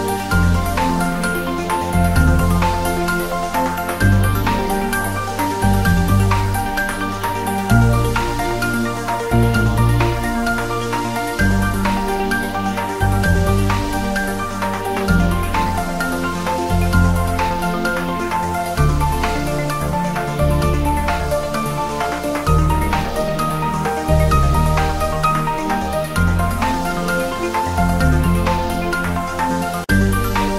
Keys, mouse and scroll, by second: 0.1 ctrl+b, 0.4-1.3 scroll up 1, 1.5 click, 1.7 Tab, 2.1-2.7 scroll up 1, 2.7-4.5 typing, 3.8 click, 4.3 click, 4.5 scroll up 1, 4.9-6.1 click, 6.4-7.0 scroll down 1, 6.7-8.8 typing, 7.7 click, 8.8 click, 8.9-9.4 scroll up 1, 10.5 click, 11.6 Return, 12.8 click, 18.0 Return, 19.8 scroll down 1, 22.5 scroll up 1, 23.5-24.2 drag, 27.7 scroll down 1, 28.2 right click, 28.4 click, 29.0 ctrl+s, 29.6-30.0 drag.